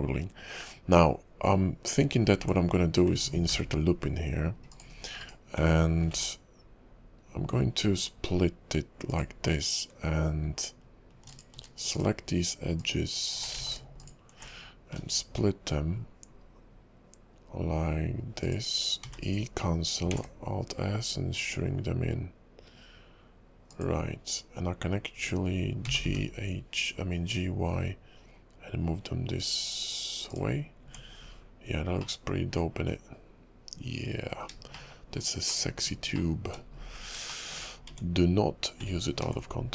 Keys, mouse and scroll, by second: 0.5 KP_5, 2.1-3.1 scroll up 5, 2.4 Tab, 3.5 ctrl+r, 6.1 ctrl+b, 11.3 alt+click, 11.9 alt+shift+click, 12.8 alt+shift+click, 13.6 ctrl+z, 14.0 alt+shift+click, 15.0 ctrl+b, 19.2 e, 20.1 alt+s, 25.8 g, 30.7-32.2 scroll down 5, 30.8 Tab, 32.2 middle click, 34.9 shift+middle click, 35.6 middle click, 36.3 shift+middle click, 36.8-37.5 scroll up 8, 37.5 shift+middle click, 37.9 Tab, 39.2 ctrl+r.